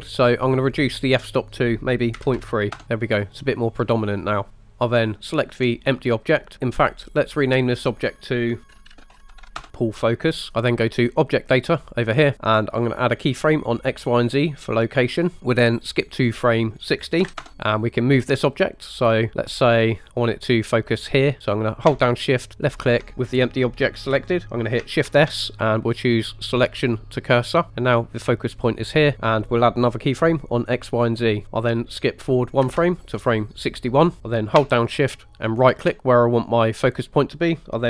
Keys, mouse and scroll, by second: 1.4-2.8 drag, 4.7 click, 5.3 click, 7.3-9.7 typing, 7.3 click, 7.6-9.6 drag, 11.8 click, 15.2 click, 16.5-17.5 drag, 22.8 shift+click, 22.8 shift+right click, 25.1 shift+s, 29.1 ctrl+z, 29.1 click, 30.5 drag, 32.7 Right, 35.6 shift+right click.